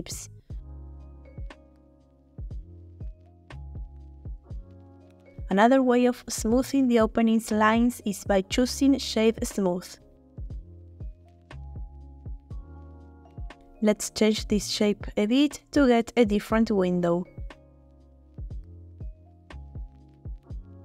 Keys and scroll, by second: 1.5 g, 1.7 x, 15.5 s, 15.6 z, 17.8 s, 20.1 h.